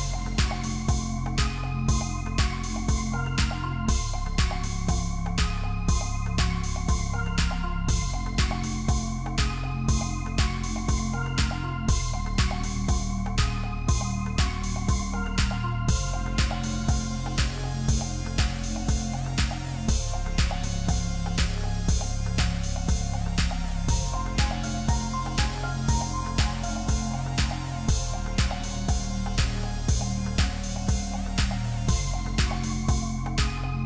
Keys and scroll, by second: 10.1 ctrl+=, 10.3 ctrl+-, 11.2-11.7 space, 22.9 ctrl+-, 25.4 ctrl+-, 25.6 ctrl+=, 26.2 ctrl+=, 26.4 ctrl+0.